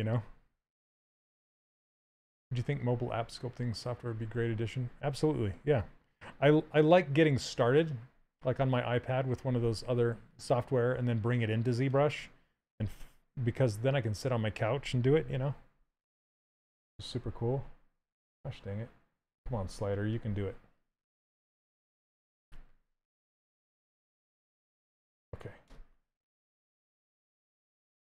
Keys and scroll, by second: 21.9 shift+f.